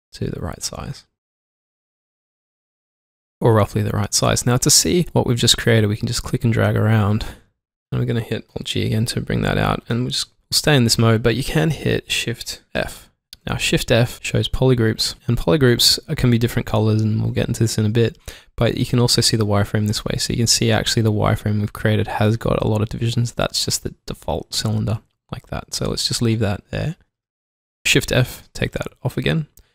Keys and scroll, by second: 7.3 alt+Num_Lock, 8.4 alt+g, 12.6 alt+g, 12.7 shift+f, 25.5 alt+Num_Lock, 27.2 alt+g, 28.4 f, 29.1 shift+f.